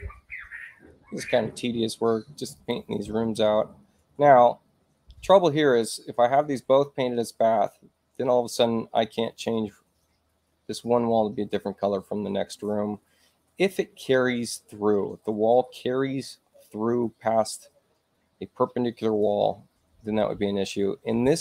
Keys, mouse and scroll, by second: 2.5 click.